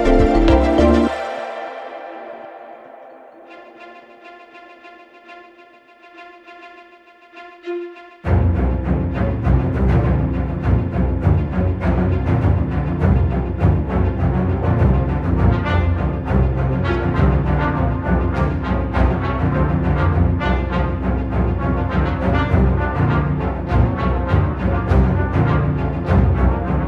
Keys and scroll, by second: 4.8 shift+f, 9.7 3, 10.0 ], 10.8 ], 16.6 !, 17.1 ], 18.1 ,, 20.9 ], 21.2 ], 21.8 ,, 22.5 F1, 22.6 F2.